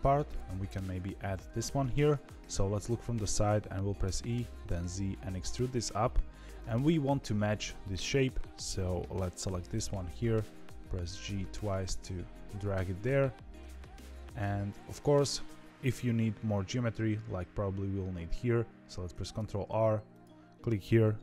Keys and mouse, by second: 0.2 shift+click, 2.4 KP_3, 4.0 e, 8.1 click, 9.7 g, 19.1 ctrl+r.